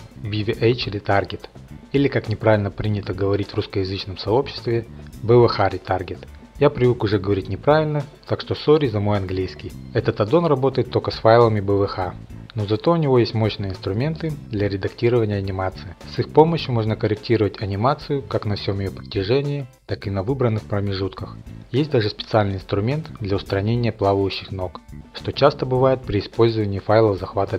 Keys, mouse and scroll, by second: 9.7 F8, 17.0 click, 19.6 shift+middle click, 19.7 click, 20.3 r, 21.3 click, 21.4 shift+click, 22.1 click, 23.0 click, 23.2 scroll, 24.3-27.3 shift+drag.